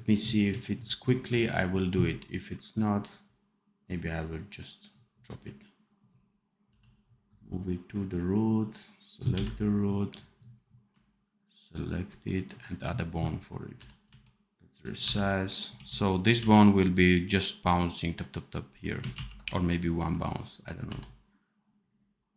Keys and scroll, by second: 6.6 p, 9.2 n, 13.7-16.3 typing, 19.0 ctrl+z, 20.8 v.